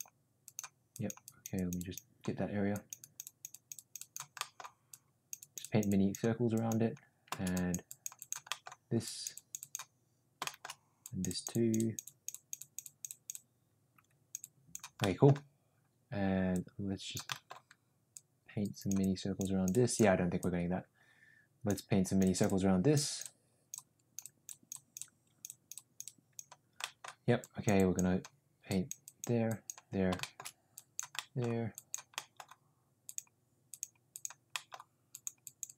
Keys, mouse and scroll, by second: 0.4 click, 0.9 click, 1.2 click, 1.5 click, 1.7 click, 2.7 click, 3.0 click, 3.5 click, 4.4 middle click, 4.9 click, 5.3 click, 5.6 click, 6.5 click, 7.5 click, 7.9 click, 8.2 click, 8.5 middle click, 9.0 click, 9.3 click, 10.4 shift+middle click, 11.0 click, 11.9 click, 12.0 click, 13.0 click, 13.3-14.3 drag, 14.4 click, 15.0 middle click, 16.5 click, 17.3 middle click, 18.1 click, 19.0 click, 19.7 click, 20.3-21.7 drag, 26.7 middle click, 27.3 click, 27.7 click, 28.6 click, 29.0 click, 29.4 click, 30.1 shift+middle click, 30.7 click, 31.1 middle click, 31.7 click, 32.1 middle click, 33.0 click, 33.6 click, 34.1 click, 34.5 middle click, 35.1 click, 35.4 click.